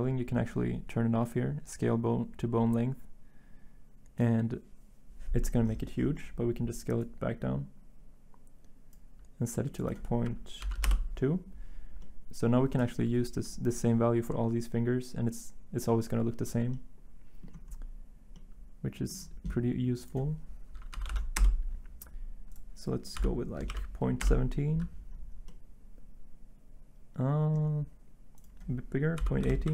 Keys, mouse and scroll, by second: 10.7 typing, 10.8 Return, 21.0 typing, 21.3 Return, 23.6-24.2 typing, 27.7 typing, 28.9-29.7 typing.